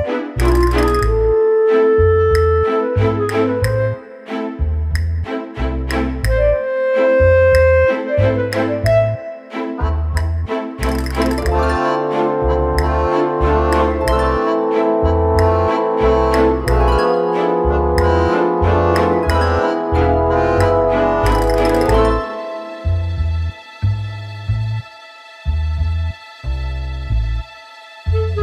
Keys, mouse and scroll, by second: 0.9-2.4 scroll up 1, 2.7 click, 3.2-4.1 scroll down 6, 3.6 middle click, 5.9 click, 6.7 click, 7.4 click, 11.2 click, 13.8 click, 14.1 click, 15.1 click, 15.6-16.1 scroll down 2, 16.1 click, 16.1-16.7 scroll down 1, 18.7-20.2 scroll down 12, 19.8 click, 20.4 click, 20.7 click, 25.4 KP_7, 28.0 right click.